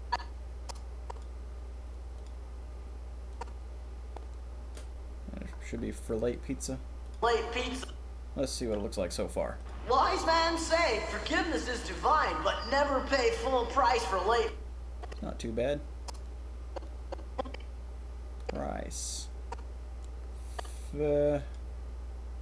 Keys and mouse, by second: 0.1-1.2 drag, 3.3-4.7 drag, 7.0 click, 7.5 click, 8.6 click, 9.5 click, 14.3 click, 14.5 middle click, 15.2 click, 20.7-22.4 drag.